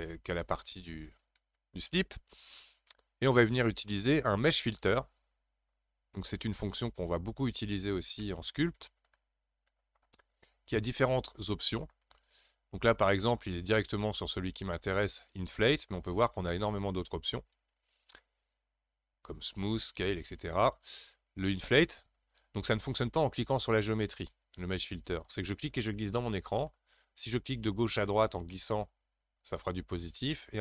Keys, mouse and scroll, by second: 4.7-7.8 drag, 8.2-11.3 middle drag, 13.0-16.1 drag.